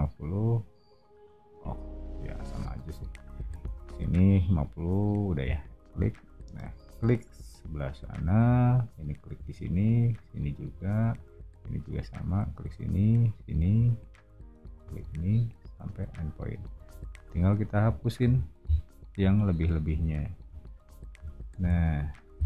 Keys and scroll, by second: 17.1 r, 18.1 e.